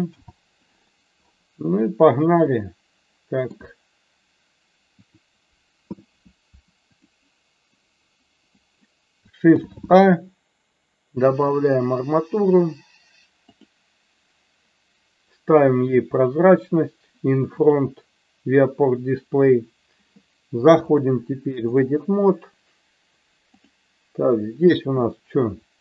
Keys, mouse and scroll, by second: 0.0 n, 2.4-3.5 shift+middle drag, 4.9 click, 9.5 shift+a, 17.6 click, 20.8-21.9 drag.